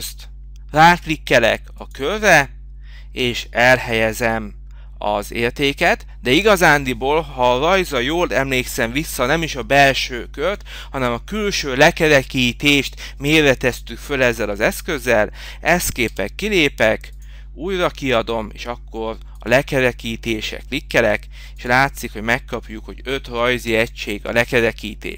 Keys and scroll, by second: 18.4 Return.